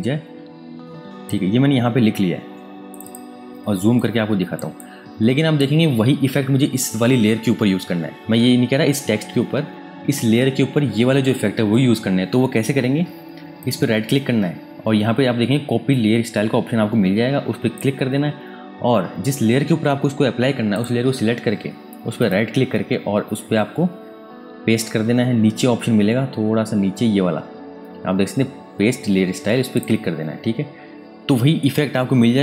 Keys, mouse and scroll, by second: 2.0 space, 2.9 click, 3.6 ctrl+space, 3.9 ctrl+click, 4.3 ctrl+space, 4.8 click, 4.9 space, 8.4 super+Num_Lock, 9.3 super+KP_Add.